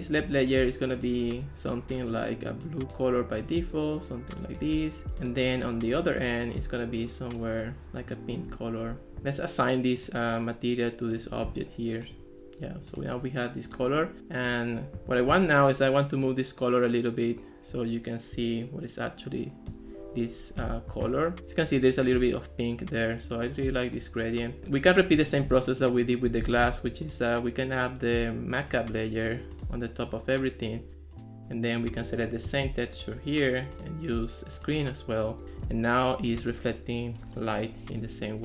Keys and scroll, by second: 25.5 ctrl+s, 26.5 ctrl+x.